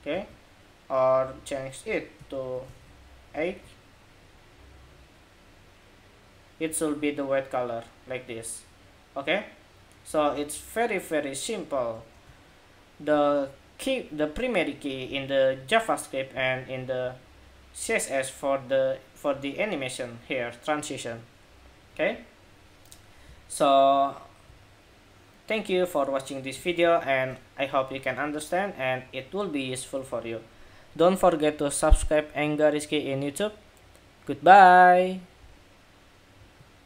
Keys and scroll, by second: 2.1 super+s, 2.5 super+Tab, 3.3 super+r, 11.9 super+Tab, 26.4 super+r.